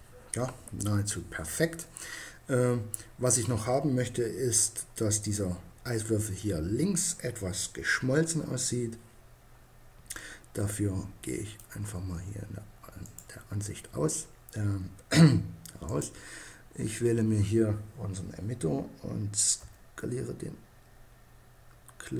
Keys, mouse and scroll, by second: 0.0 Escape, 9.6-12.6 middle drag, 12.6-14.2 right drag, 14.4 middle click, 15.3-16.8 right drag, 16.8 click, 19.2 s.